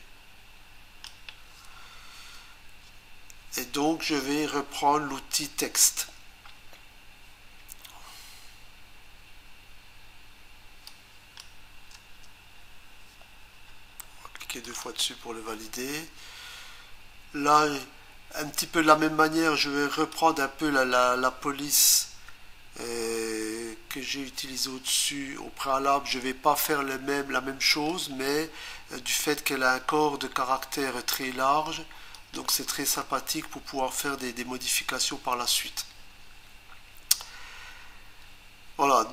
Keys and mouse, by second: 10.9 click, 11.9 Return, 14.7 click, 14.8 click, 15.0 double click, 19.9 click, 22.0 Return, 24.6 click, 32.2 click.